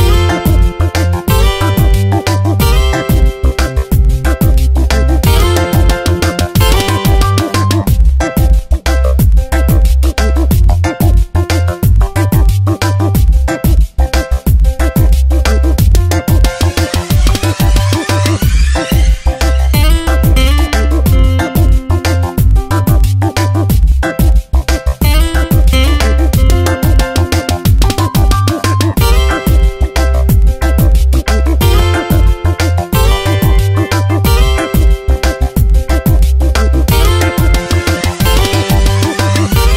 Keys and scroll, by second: 1.0 ctrl+shift+n, 1.2 Return, 5.0 space, 7.9 Tab, 11.6 ctrl+d, 12.5 v, 12.8 Tab, 14.6 ctrl+z, 15.5 Tab, 17.1 p, 31.3 ctrl+z.